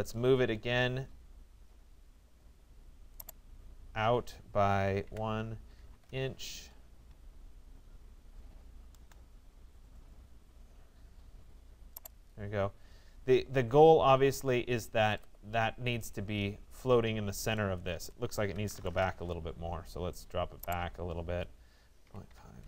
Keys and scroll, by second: 4.7 1, 5.9 Return, 18.5 Return, 22.1 Delete, 22.3 5.